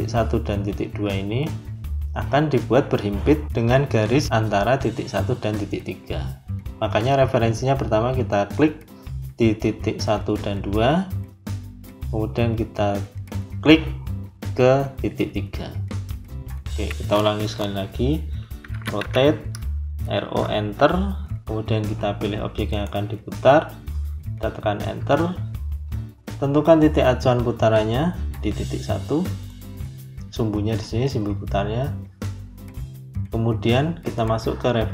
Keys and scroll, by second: 18.6 r, 18.9 o, 20.1 Return, 24.9 Return.